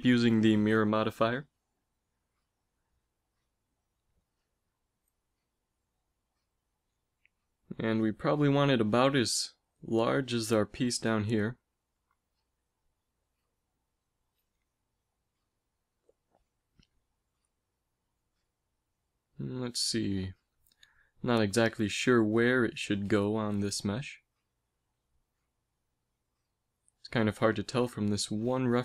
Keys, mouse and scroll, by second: 0.8 s, 2.6 KP_1, 3.0 z, 6.0 g, 9.9 s, 11.5 g, 23.0-25.0 middle drag, 25.0 z.